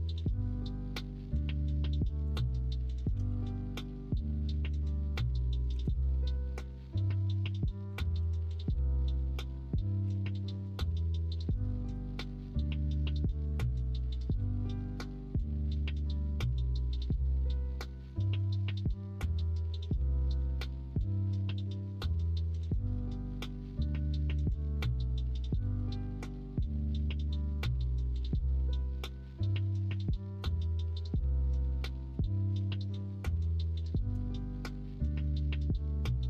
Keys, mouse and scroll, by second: 2.8-5.7 middle drag, 5.7 s, 8.1 ctrl+r, 9.4 middle click, 10.0 3, 12.1 x, 12.8 x, 13.9 middle click, 15.7 middle click, 16.5 middle click, 17.3 middle click, 18.0 ctrl+r, 19.8 3, 24.8 alt+s, 25.7 ctrl+z, 26.8 middle click, 27.3 alt+e, 32.0 3, 34.1 x, 35.0 middle click, 35.5 middle click.